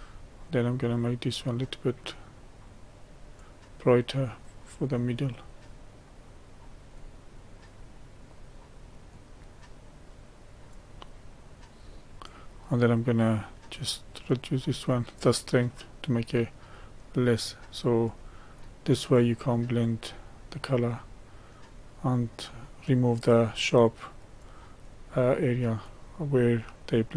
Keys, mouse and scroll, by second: 1.6-27.1 drag.